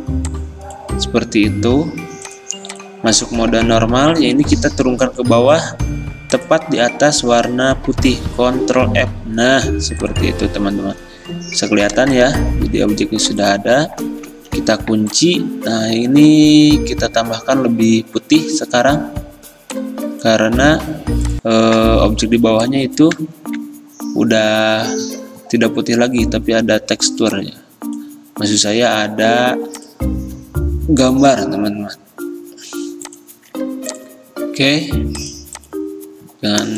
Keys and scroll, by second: 5.3 ctrl+x, 8.8 ctrl+f, 14.6 ctrl+2, 23.4 ctrl+z.